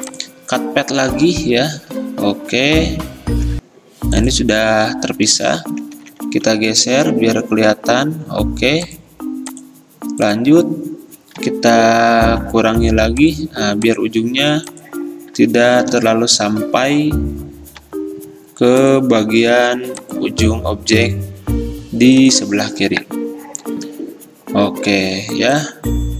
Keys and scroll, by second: 1.6 x, 3.5 v, 6.1 Right, 6.2 Right, 6.4 Right, 6.5 Right, 6.7 Right, 6.9 Right, 7.5 Right, 7.7 Right, 7.9 Right, 11.8 -, 14.8 0, 16.0 ctrl+z, 17.9 =, 21.1 -, 25.1 v.